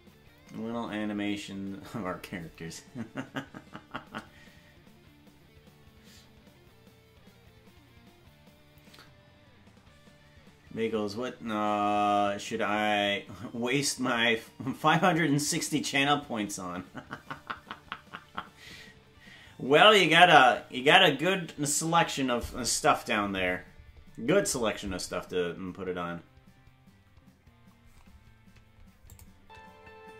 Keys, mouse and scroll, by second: 29.1 click, 29.3 space.